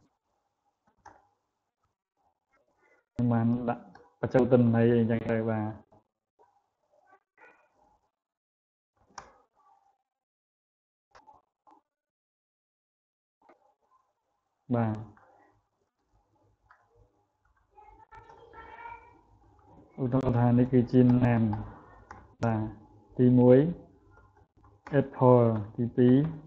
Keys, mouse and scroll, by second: 3.9-25.5 drag.